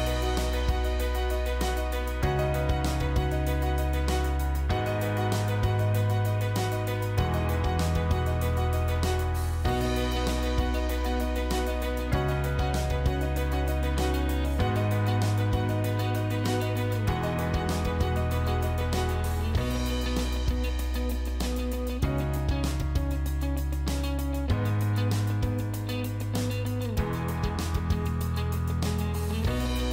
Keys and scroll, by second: 4.2 F2.